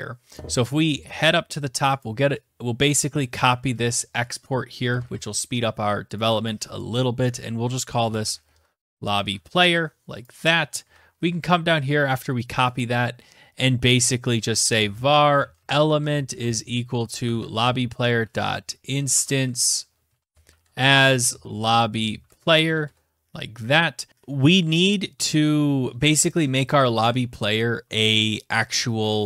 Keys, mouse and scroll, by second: 0.9 click, 0.9-2.1 scroll down 1, 2.1 click, 2.1-2.4 scroll, 2.7 ctrl+c, 3.2 click, 3.8 Return, 4.0 ctrl+v, 5.1 click, 5.2 click, 6.7-8.8 typing, 9.2 click, 9.3 click, 9.8 ctrl+c, 10.0 scroll down 5, 11.0-11.7 scroll down 1, 11.7 click, 13.2-15.7 typing, 14.2 scroll, 16.2 ctrl+v, 16.7-17.6 typing, 18.0 Tab, 18.7-22.3 typing, 25.8 click, 25.9 click.